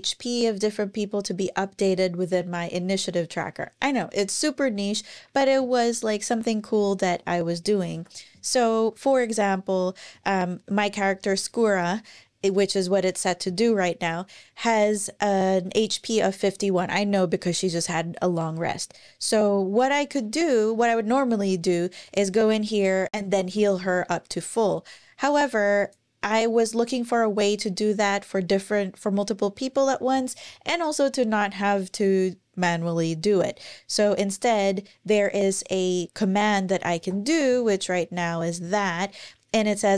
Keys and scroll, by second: 6.8 ⟲, 7.7 ctrl+super+r, 36.7 alt+shift+d.